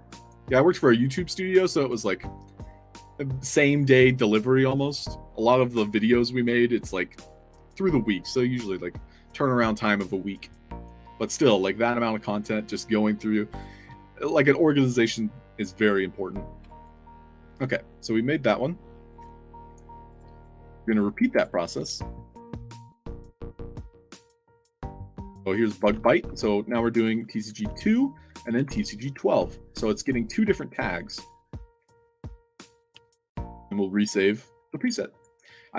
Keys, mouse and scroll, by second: 11.3 click, 15.6 click, 16.6 alt+drag, 19.1 click, 20.0 click, 20.3 click, 20.6 ctrl+c, 20.8 click, 21.3 click, 22.8 click, 23.0 click, 23.6-24.6 typing, 25.5 click, 25.9 ctrl+v, 27.4 click, 27.6 ctrl+v, 28.5 1, 30.9 click, 32.3 click, 33.1 c, 34.1 click, 35.0 click.